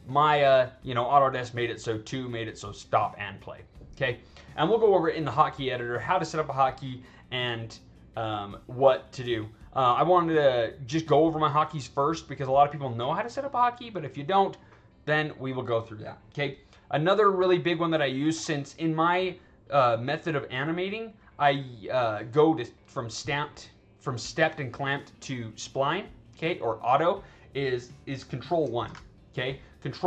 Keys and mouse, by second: 28.8 ctrl+1.